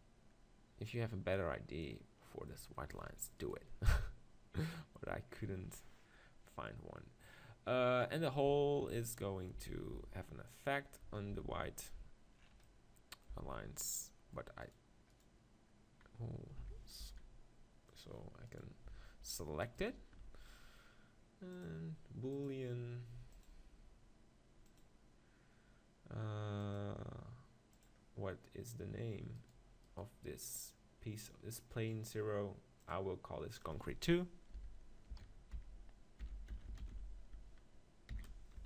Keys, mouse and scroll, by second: 2.2 middle click, 3.4-5.1 right drag, 9.6 z, 9.9 z, 11.3 z, 13.3 z, 14.6-16.7 middle drag, 16.7 s, 18.0 click, 18.5 right click, 19.8 right click.